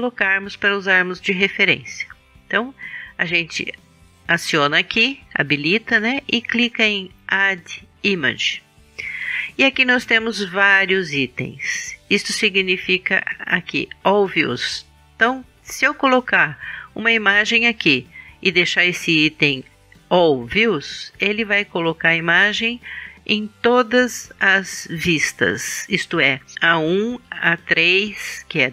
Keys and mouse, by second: 3.5-5.4 drag, 5.4 middle click, 6.1-7.9 drag, 7.9-10.3 middle drag.